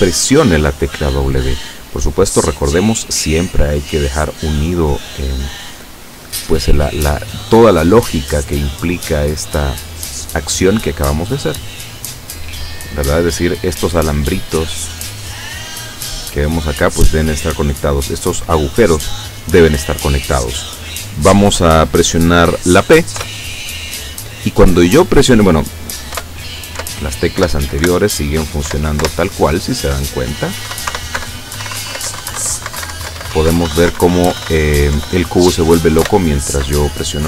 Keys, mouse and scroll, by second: 2.2-4.3 drag, 7.3 click, 8.7 click, 10.1 click, 11.6 click, 23.3 p, 26.3 Up, 27.5 Left, 27.9 Right, 28.8 Down, 29.1 Left, 30.8 Up, 31.0 Right, 31.2 Down, 31.7 Left, 31.7 Up, 31.9 Right, 32.0 Left, 32.2 Up, 32.3 Right, 32.4 Left, 32.5 Up, 32.7 Right, 32.8 Left, 32.9 Up, 33.0 Right, 33.1 Down, 33.3 Up, 33.4 Right, 33.5 Down, 33.7 Up, 33.8 Right, 33.9 Down, 34.1 Up, 34.2 Down, 34.4 Left, 34.5 Up, 35.0 Down, 36.1 Up.